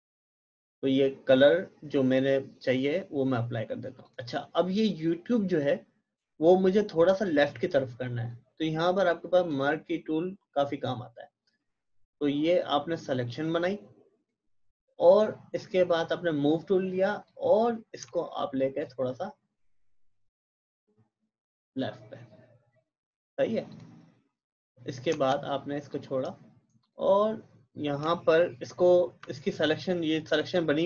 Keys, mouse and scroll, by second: 4.0 click, 9.4 click, 12.6-22.6 drag, 23.7 click.